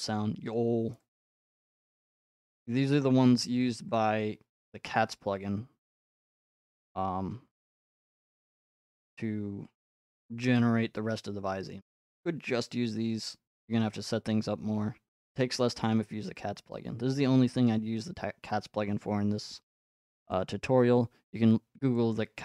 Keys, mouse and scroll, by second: 0.5 click, 1.4 click, 2.1 click, 3.4 click, 4.7 click, 6.0 click, 6.6 middle click, 15.8-17.9 drag, 20.5-22.4 drag.